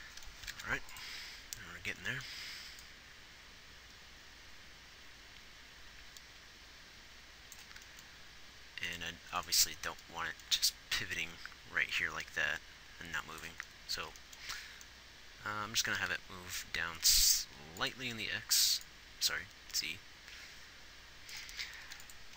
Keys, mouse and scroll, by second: 22.1 ctrl+s.